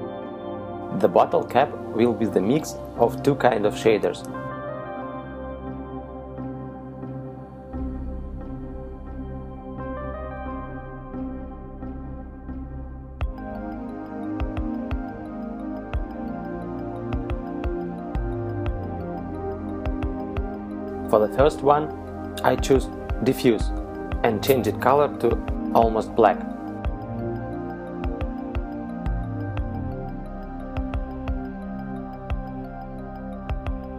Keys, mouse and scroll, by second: 3.6 middle click, 4.6 KP_Decimal, 6.6 scroll down 1, 7.3-7.7 scroll down 1, 10.4 click, 11.6 click, 15.9 click, 24.6 click, 28.6 click.